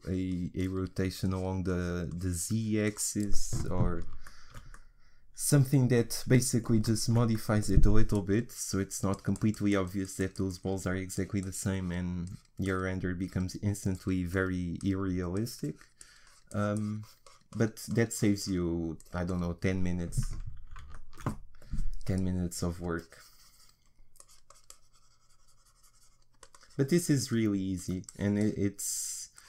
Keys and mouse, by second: 5.1 middle click, 5.9 middle click, 6.4 middle click, 9.1-17.1 middle drag, 20.9 middle click, 22.8-29.4 drag.